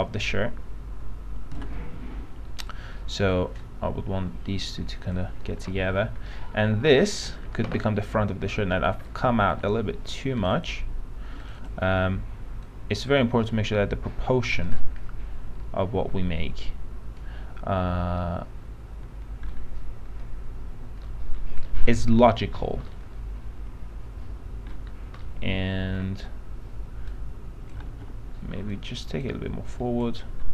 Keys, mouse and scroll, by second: 2.8-5.8 drag, 5.8 p, 5.9 middle click, 6.0-6.4 scroll down 1, 6.5-7.8 alt+middle drag, 8.1 scroll up 1, 8.3-8.6 scroll down 1, 8.6 middle click, 9.3 alt+middle click, 10.6-12.0 drag, 12.8-14.8 drag, 14.9-19.9 alt+middle drag, 23.1-25.0 alt+middle drag, 25.4-27.2 alt+middle drag, 27.2 click, 28.0 ctrl+z, 28.8 click, 30.0 alt+click.